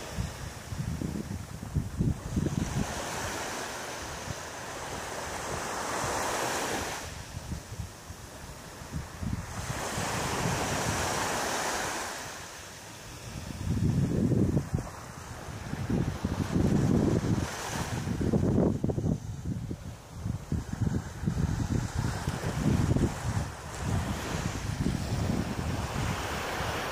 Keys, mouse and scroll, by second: 0.4 shift+right click, 1.3 shift+right click, 1.6 shift+right click, 2.0 middle click, 3.5 KP_3, 4.5 KP_1, 6.0-6.5 scroll down 4, 7.3 shift+d, 8.3 click, 9.0 middle click, 10.8 middle click, 11.6 middle click, 12.8 shift+middle click, 14.8 middle click, 18.6 shift+middle click, 19.4 scroll up 1, 19.9 scroll up 2, 20.4 middle click, 25.3 click, 26.3 right click.